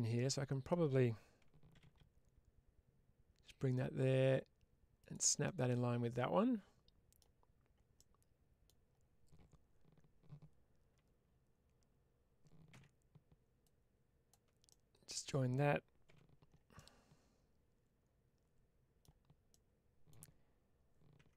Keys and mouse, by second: 0.0 middle click, 4.9 ctrl+click, 5.3-7.0 middle drag, 7.8 middle click, 12.6 alt+q, 13.5 click, 14.5 middle click, 15.9 w, 16.6-18.9 middle drag, 19.4 middle click.